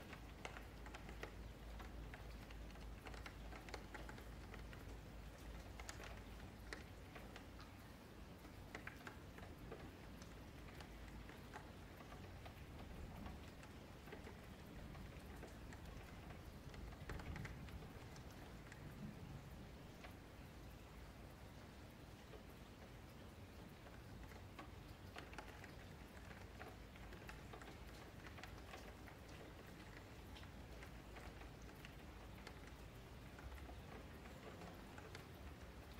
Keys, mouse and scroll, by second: 0.5 click, 2.0 KP_Divide, 3.2 middle click, 3.6 scroll down 1, 3.9-5.1 middle drag, 5.1 click, 7.1 y, 8.2 click, 9.9-11.8 middle drag, 11.8 Tab, 12.2 3, 12.5 click, 12.9 middle click, 13.7 click, 16.9 middle click, 17.9 ctrl+z, 18.8 q, 20.3 Tab, 20.4 click, 20.8 Tab, 21.0 3, 21.2 click, 21.8 ctrl+click, 22.7 s, 24.1-28.7 middle drag, 28.7 click, 30.0 ctrl+click, 32.1-34.8 middle drag, 34.8 Tab, 35.1 click, 35.5-35.9 middle drag, 35.8-35.9 scroll down 1.